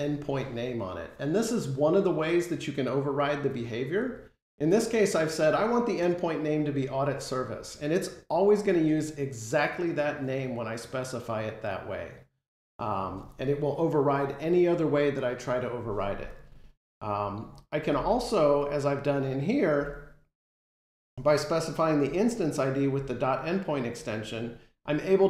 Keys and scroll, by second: 17.8 ctrl+Tab.